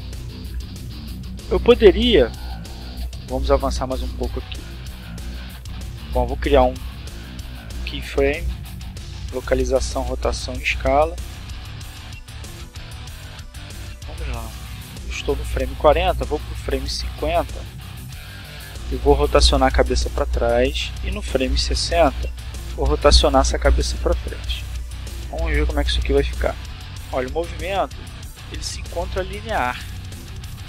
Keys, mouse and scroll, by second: 0.0 click, 1.5 right click, 3.3 i, 7.4 click, 9.4-10.9 drag, 13.5 click, 15.7 r, 17.0 click, 17.8 click, 19.2 r, 20.4 click, 21.0-22.0 drag, 22.6 click, 23.8 click, 24.4-25.6 drag, 26.3 click, 27.2 click, 28.1-29.9 drag, 30.5 click.